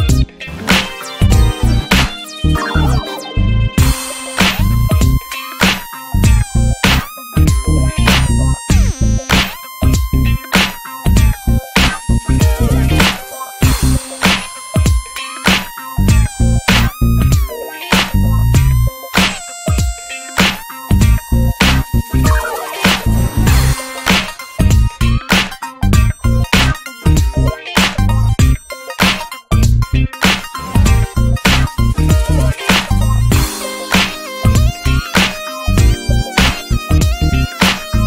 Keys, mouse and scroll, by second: 0.3 click, 0.6-1.3 middle drag, 1.3 ctrl+s, 1.5 scroll down 1, 1.7 middle click, 2.1 a, 2.4 x, 2.8 middle click, 3.2 middle click, 3.6 ctrl+s, 3.8 click, 4.0 shift+a, 5.3-5.7 shift+middle drag, 5.7-6.4 scroll down 2, 6.0 Tab, 6.4-8.0 middle drag, 8.0 m, 9.2 drag, 9.5 alt+middle click, 9.6 alt+middle click, 9.8-10.6 scroll up 7, 10.2 shift+middle click, 10.6 shift+middle drag, 10.9 shift+middle click, 11.1-11.5 scroll up 2, 11.6 shift+middle click, 12.1 shift+middle click, 12.3 scroll up 2, 12.7 e, 13.5 click, 14.4 shift+middle click, 14.5-15.2 scroll up 4, 14.8 shift+middle click, 15.2 click, 15.9 shift+middle click, 16.2 e, 17.8 e, 19.1 click, 20.0 click, 20.3 click, 20.7 click, 21.2 click, 22.4 click, 23.2 e, 23.8 click, 25.0 shift+middle click, 25.0-25.3 shift+scroll up 1, 25.3 e, 26.1 click, 27.1 e, 28.6-30.4 drag, 30.7 click, 31.5 shift+middle click, 31.7 e, 32.4-33.4 drag, 33.4 shift+middle click, 33.9 e, 35.3 e, 36.9 shift+middle click, 37.2 e, 37.8-38.0 drag.